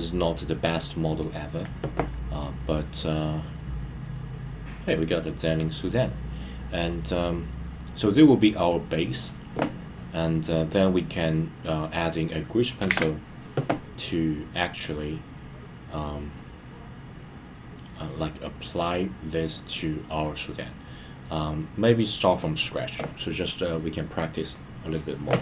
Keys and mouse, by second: 2.4-5.5 middle drag, 8.0-8.7 middle drag.